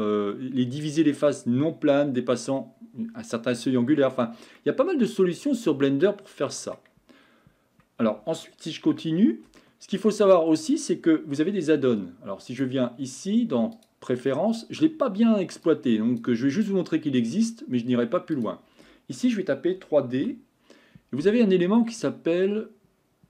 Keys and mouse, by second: 4.6-6.8 middle drag, 8.9 Tab, 9.6-10.0 shift+middle drag, 12.5-13.9 drag.